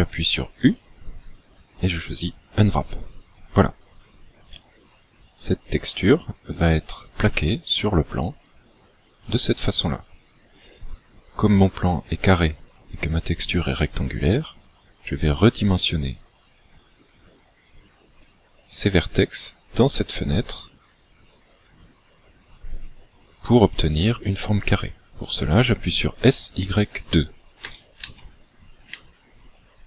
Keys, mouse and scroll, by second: 0.7 u, 27.7 s.